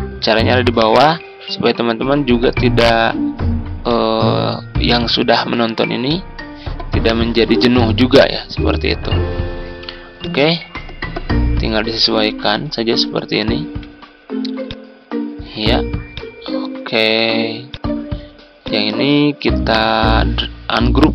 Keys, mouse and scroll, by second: 7.8 ctrl+v, 10.2-13.3 drag, 13.5 ctrl+scroll up 1, 14.6 ctrl+click, 16.1-17.3 drag, 21.0 ctrl+u.